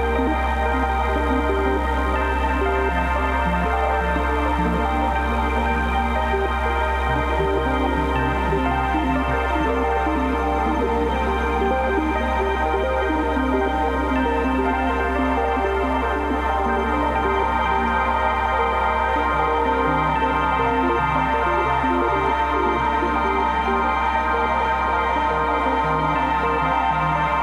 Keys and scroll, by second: 1.1-4.0 typing, 5.4-8.0 typing, 9.7 c, 14.3 Return, 15.2 v, 15.4 space.